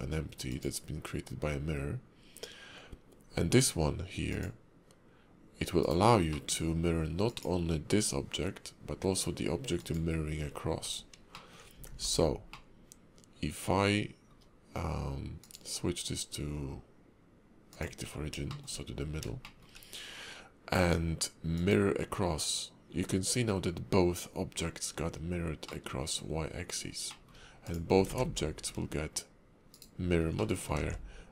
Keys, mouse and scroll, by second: 0.5 click, 6.3 middle click, 7.2 click, 9.7 shift+click, 11.3 middle click, 11.9 alt+x, 12.5 middle click, 15.4 click, 18.7 shift+middle click, 19.4 shift+middle click, 21.5 click, 25.6 middle click, 27.1 middle click, 27.6 click, 28.0 ctrl+`, 30.4 middle click, 30.7 alt+x.